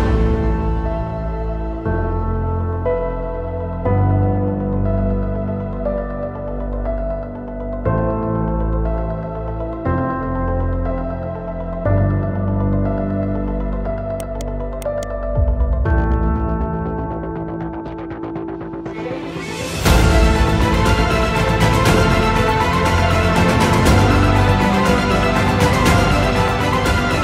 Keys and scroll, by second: 4.8 alt+c, 6.4 shift+F2, 7.0 Escape, 7.4 F4, 8.2 Escape, 8.3 F2, 19.7 ctrl+g, 20.8 c, 21.7 Delete, 24.8 alt+c, 26.6 Escape, 27.0 F4.